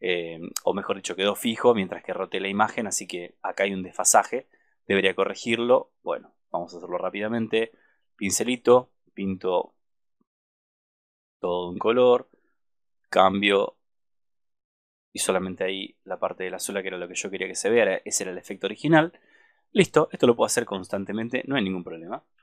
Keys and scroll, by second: 22.3 super+-.